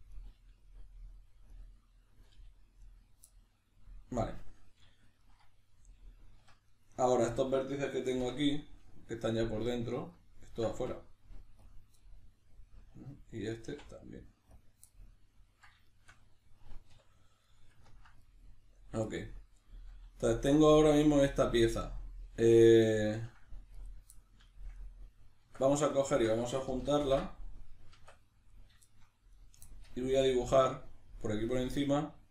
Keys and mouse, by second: 0.1 right click, 0.4 g, 1.2 click, 1.5 right click, 2.3 g, 3.0 right click, 3.3-6.7 middle drag, 6.4 1, 6.7 right click, 6.8-9.7 middle drag, 8.2 \, 9.7 ctrl+right click, 10.1 ctrl+right click, 10.4 ctrl+right click, 10.8 x, 12.0-13.4 middle drag, 13.4 right click, 13.7 x, 14.9-23.8 middle drag, 16.9 \, 23.8 right click, 24.2-25.9 middle drag, 25.4 Tab, 25.9 shift+right click, 27.0 ctrl+j, 28.5 right click, 28.8-29.3 shift+middle drag, 29.3 right click, 29.7-32.3 shift+middle drag.